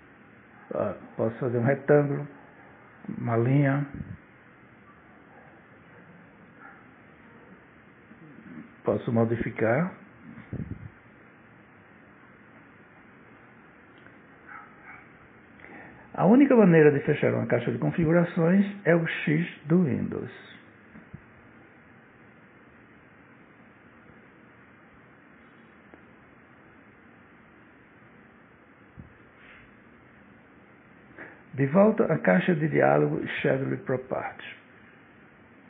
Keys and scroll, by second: 14.1 ctrl+z.